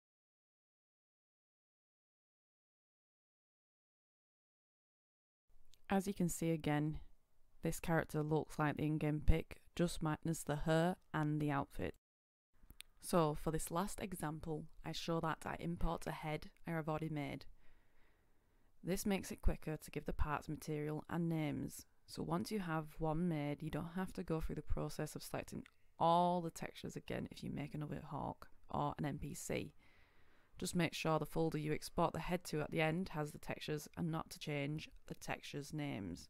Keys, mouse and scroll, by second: 0.6-1.0 scroll down 1, 1.0 click, 1.7 scroll up 1, 2.2 click, 3.0 Return, 3.5-8.9 drag, 9.2 right click, 9.6-9.9 scroll up 1, 9.9 click.